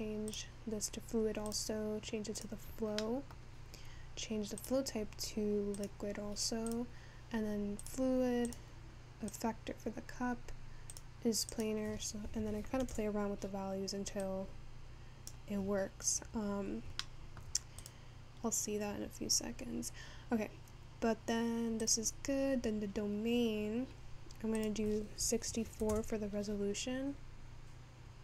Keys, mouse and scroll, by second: 4.1-6.6 scroll down 2, 6.8-28.2 drag.